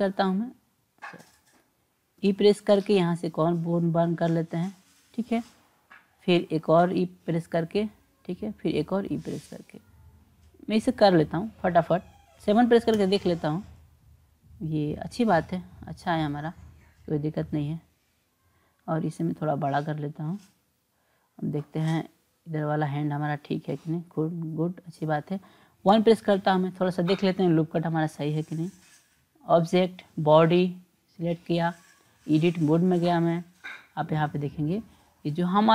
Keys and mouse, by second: 2.2 e, 6.5 e, 8.6 e, 12.9 KP_7, 17.4 click, 19.4-20.6 drag, 22.8-24.9 drag, 25.9 KP_1, 28.7 click, 31.9-33.1 drag.